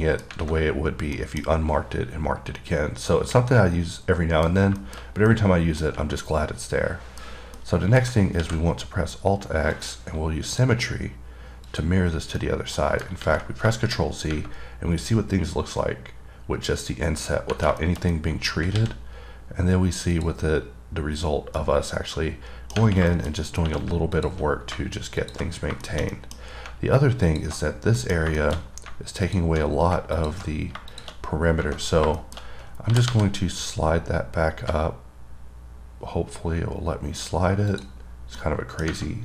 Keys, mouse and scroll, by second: 0.3 middle click, 1.4 middle click, 1.9-3.0 scroll up 1, 3.0-3.4 scroll down 3, 3.4 middle click, 5.1 middle click, 5.2 scroll down 2, 5.5 middle click, 6.4 middle click, 7.6 scroll down 1, 7.8 middle click, 10.0 click, 10.7 click, 11.9 click, 12.6 middle click, 14.0 middle click, 14.3-14.6 scroll up 3, 17.7 scroll down 2, 18.1 middle click, 18.4 double middle click, 20.4 click, 21.8 middle click, 23.4 middle click, 23.6-23.9 scroll up 3, 24.4 click, 25.5 click, 25.9 scroll down 3, 26.0 scroll up 1, 26.1 middle click, 26.4 double middle click, 26.6 scroll up 2, 27.5 click, 28.0 scroll down 1, 28.2 middle click, 28.6 middle click, 28.9 scroll up 3, 29.5 click, 30.4 click, 31.2 click, 32.1 scroll down 3, 32.4 middle click, 32.7-33.2 scroll up 3, 38.0 click, 38.3 scroll down 2, 38.6 middle click.